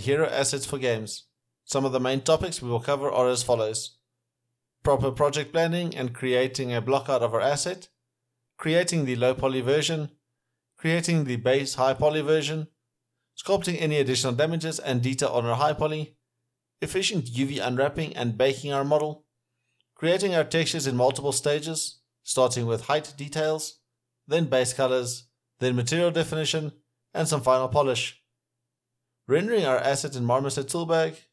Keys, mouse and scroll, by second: 0.8 alt+middle click, 1.3 alt+click, 1.4 alt+middle click, 1.5-2.2 alt+scroll up 2, 2.5 scroll down 1, 4.4 alt+click, 4.6 scroll down 1, 5.2 alt+scroll up 1, 5.3 r, 6.1 w, 6.6 alt+click, 6.8 ctrl+right click, 6.9 alt+click, 7.0 w, 8.2 shift+click, 8.5 alt+click, 8.9 shift+click, 9.0 shift+click, 10.5 middle click, 11.7 alt+middle click, 13.0 alt+middle click, 13.5 alt+click, 14.6 double click, 14.9 alt+click, 15.5 alt+click, 16.6 alt+scroll up 1, 16.8 alt+middle click, 16.9 alt+right click, 17.5 alt+click, 17.6-18.1 alt+scroll down 2, 17.7 alt+middle click, 17.8 alt+click, 18.1 alt+right click, 18.3 alt+middle click, 18.5 alt+click, 18.6 alt+middle click, 18.9 alt+click, 19.1 alt+right click, 19.4 shift+click, 19.5 scroll down 1, 19.6 alt+middle click, 20.3 alt+click, 22.5 right click, 23.4 scroll down 1, 23.5 scroll, 23.7 scroll down 1, 24.0 alt+middle click, 24.0-24.9 scroll up 1, 27.9 double click, 29.2 alt+middle click, 31.0 alt+middle click.